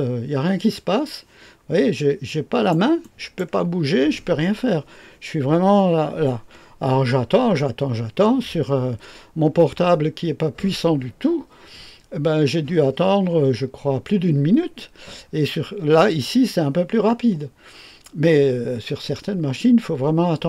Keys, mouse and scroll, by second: 2.2 click, 3.0 click.